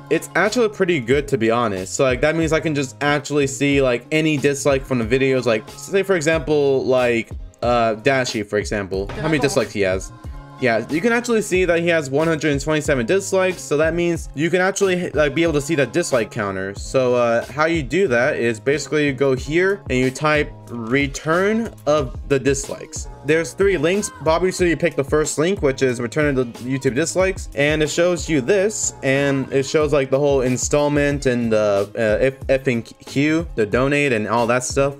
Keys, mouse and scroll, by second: 1.0 click, 1.6 click, 1.8 click, 6.8 scroll down 1, 8.0 click, 9.0 click, 10.9 scroll down 1, 17.2 middle click, 18.6 click, 20.0 click, 24.2 click, 25.9 click, 30.3 click, 31.3 click, 34.0 click, 34.9 click.